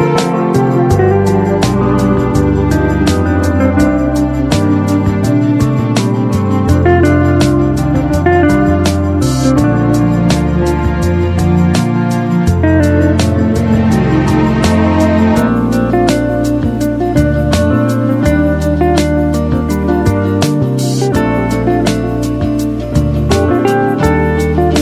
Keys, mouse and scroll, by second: 1.2 click, 2.5-4.1 typing, 2.7-4.2 click, 5.2 click, 7.2 Delete, 10.5 click, 13.3 click, 22.0 click.